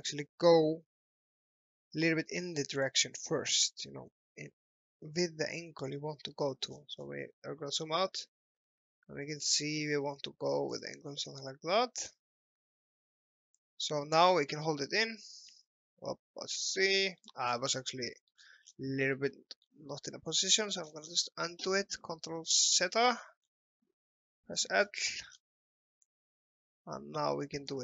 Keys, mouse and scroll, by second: 2.8 click, 6.4-6.8 scroll up 1, 10.7 click, 11.1 scroll up 1, 11.4 alt+middle click, 12.0-12.4 scroll down 1, 13.6 click, 14.3-14.6 scroll up 1, 14.9 alt+middle click, 16.2 scroll up 1, 16.7 alt+middle click, 17.5-17.8 scroll up 1, 18.0 alt+middle click, 18.4 scroll down 1, 19.3 alt+middle click, 20.1 ctrl+z, 20.9 scroll up 1, 22.8 ctrl+z, 23.2 scroll up 1, 23.5 scroll down 1, 24.3 l, 24.9 scroll up 1, 25.1 scroll down 1, 26.0 click.